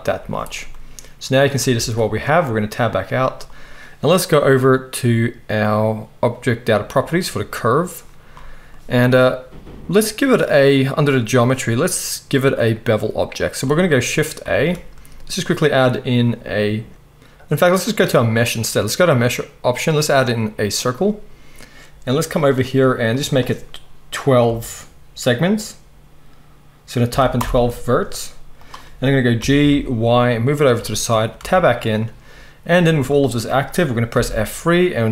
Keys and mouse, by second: 0.2 z, 1.7 Tab, 6.9 click, 6.9 middle click, 8.7-11.3 drag, 14.5 shift+a, 27.3-31.7 drag, 27.3-30.7 middle drag, 27.3-30.7 right drag, 29.4 g, 31.4 Tab, 31.7 right click, 31.9-34.4 drag, 34.2 F3, 34.4-35.1 right drag.